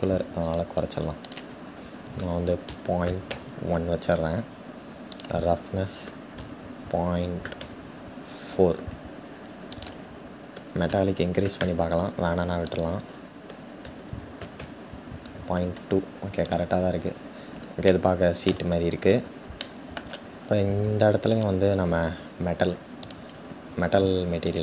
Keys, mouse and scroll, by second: 17.4-18.4 middle drag, 18.4-19.1 scroll down 1, 19.1-21.0 shift+middle drag, 21.0 click, 22.9-24.6 drag.